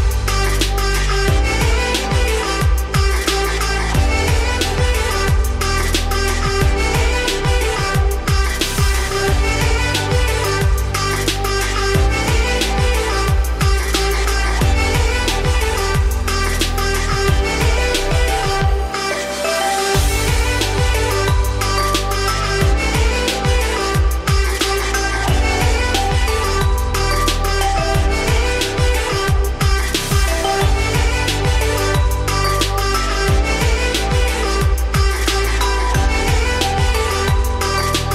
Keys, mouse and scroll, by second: 2.6 `, 3.3-4.4 scroll up 2, 4.4-7.4 shift+drag, 7.7 click, 8.3-8.6 scroll down 4, 8.6-9.9 shift+middle drag, 9.9-14.8 drag, 14.8-15.4 scroll up 3, 15.4-15.8 scroll up 2, 15.8 g, 17.2 scroll down 3, 17.4-18.9 middle drag, 18.9 shift+click, 20.0 ctrl+KP_Subtract, 21.4 click, 21.8 Tab, 22.1 a, 22.9 shift+n, 23.5 Tab, 23.9-25.9 middle drag, 25.9 Tab, 27.2 z, 27.5 shift+middle click, 27.7-28.3 scroll up 5, 28.3 click, 28.9 g, 32.7 Tab, 33.0 z, 33.2 scroll down 4, 33.4-34.6 middle drag, 34.6-35.7 scroll up 2, 35.7 shift+click, 36.1 Tab, 36.4 `, 37.6 click.